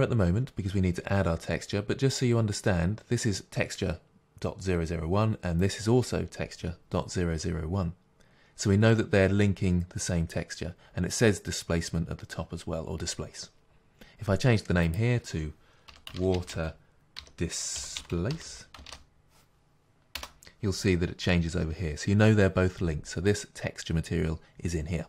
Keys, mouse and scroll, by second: 20.7 t.